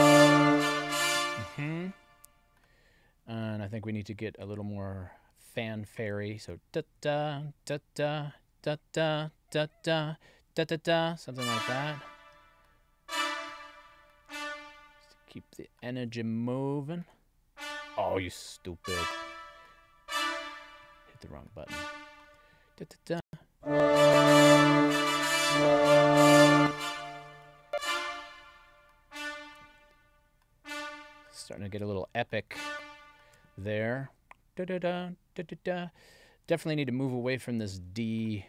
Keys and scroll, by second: 0.8 space, 23.1 space, 26.4 space.